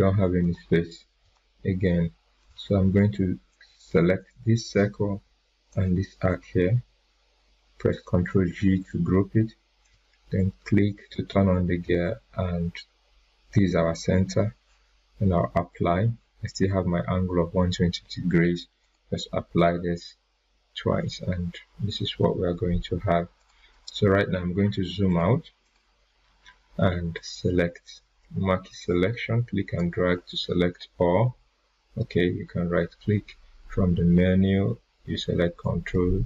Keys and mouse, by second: 0.4 click, 0.7 right click, 1.3 right click, 2.4 click, 5.2 click, 8.4 ctrl+g, 9.8-14.2 drag, 18.8 click, 23.3 click, 23.7 right click, 25.0-28.7 drag, 31.9 right click, 35.6-36.2 drag.